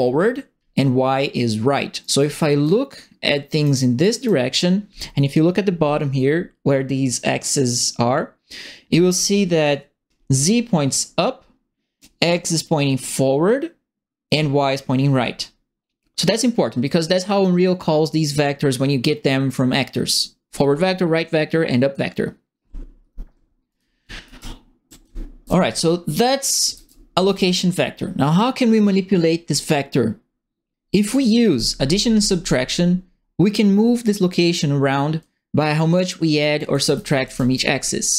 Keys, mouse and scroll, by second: 2.0-3.6 right drag, 2.2 a, 4.0 right click, 12.0-14.2 alt+drag, 23.5-25.0 typing, 23.7-27.3 right drag, 26.3-27.6 typing, 35.2 right click, 36.3-37.7 typing, 36.4-37.5 right drag.